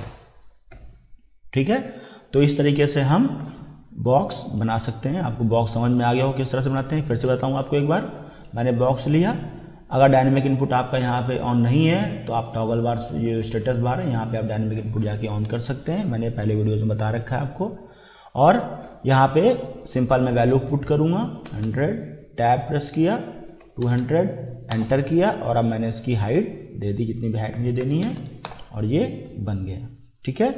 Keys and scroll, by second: 2.5 Escape, 21.0 1, 21.5 0, 22.2 Tab, 23.4-24.4 typing, 24.7 Return, 27.6-28.6 typing, 30.3 Escape.